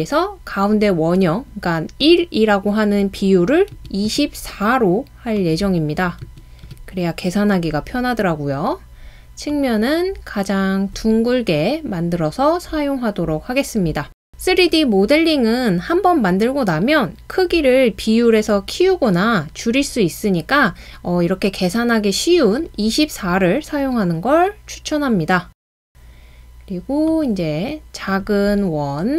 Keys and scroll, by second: 3.8 typing, 6.2-6.7 typing.